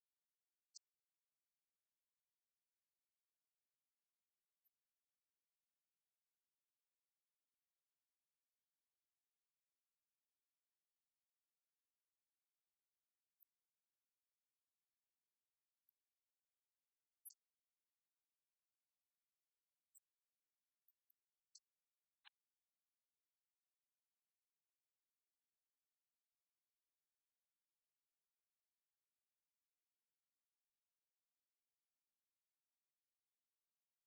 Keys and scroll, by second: 1.7 shift+Up, 3.1 shift+Up, 13.4 shift+Up, 14.3 shift+Up, 17.5 shift+Up, 20.8 shift+Down, 21.5 shift+Down, 25.1 shift+Up, 28.2 shift+Up.